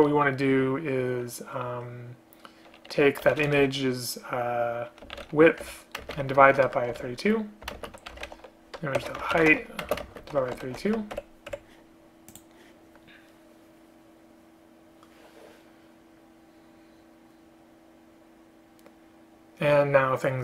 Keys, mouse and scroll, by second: 5.7 Return, 6.1 space, 6.3 space, 7.8 space, 9.9 space, 10.1 space, 11.2 Escape, 11.6 Escape.